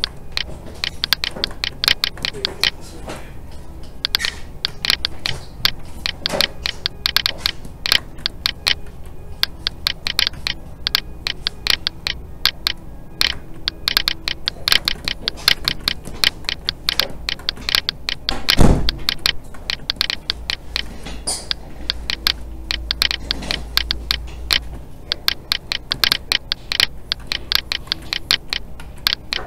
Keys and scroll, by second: 3.0 alt+a, 8.8 alt+a, 20.9 alt+a, 28.7 alt+a.